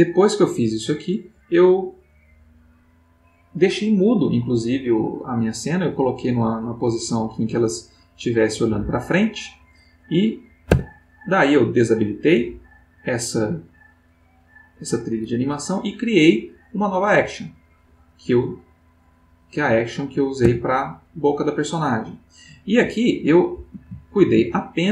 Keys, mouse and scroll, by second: 3.2-9.2 drag, 10.7 Tab, 12.0 click, 18.9 click, 19.5 click, 20.4 Tab, 23.0-23.8 ctrl+middle drag, 24.1 ctrl+shift+middle click.